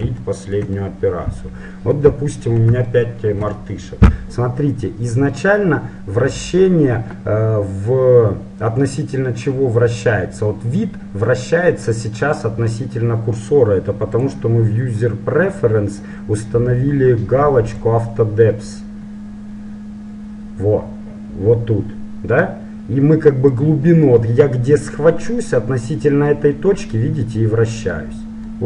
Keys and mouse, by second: 0.3-2.4 middle drag, 12.8-16.7 drag, 25.1-26.9 middle drag, 28.5-28.6 middle drag.